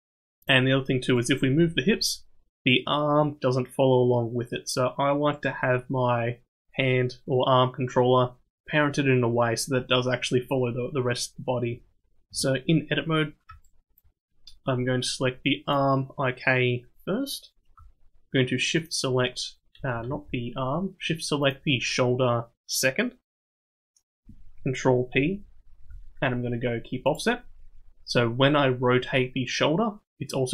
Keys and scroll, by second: 1.5 g, 12.2 Tab, 20.0 ctrl+z, 25.1 ctrl+p.